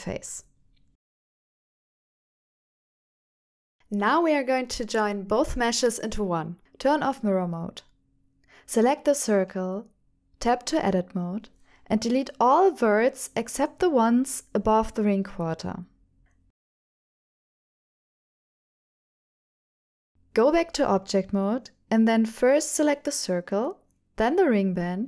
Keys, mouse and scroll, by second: 0.1 Tab, 1.2 click, 1.5-3.5 middle drag, 3.7 ctrl+alt+shift+f, 6.3 click, 7.3-8.5 middle drag, 8.7-9.7 middle drag, 10.0 Tab, 10.3 click, 10.8 shift+middle click, 11.3 Tab, 11.7 middle click, 12.6 KP_7, 15.5 alt+a, 15.8 c, 18.4 Escape, 19.2 x, 19.6 middle click, 20.9 Tab, 21.2 middle click, 23.4 shift+click.